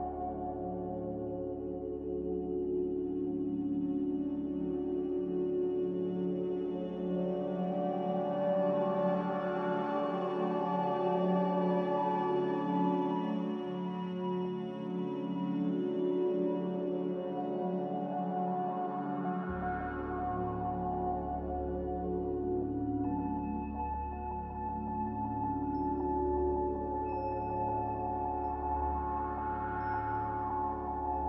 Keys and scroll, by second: 5.1 a, 8.9 9, 9.0 5, 9.3 Return, 11.8 b.